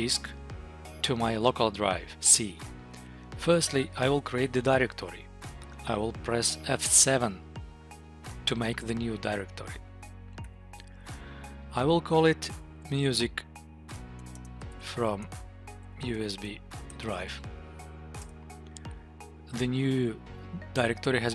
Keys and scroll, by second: 10.4 F7, 13.7 BackSpace, 18.0 Return, 20.4 Down, 20.6 Up.